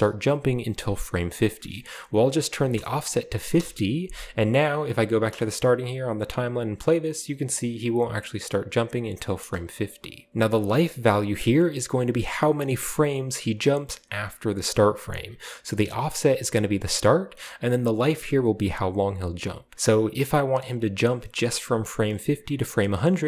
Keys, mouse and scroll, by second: 1.4 click, 2.5 typing, 3.5 Return, 4.6 drag, 5.2-5.5 drag, 5.2 space, 7.6 click, 8.4 click, 8.8 click, 9.3 space, 10.3 Return, 10.3 0, 10.3 click, 10.9 right click, 20.6-22.8 drag.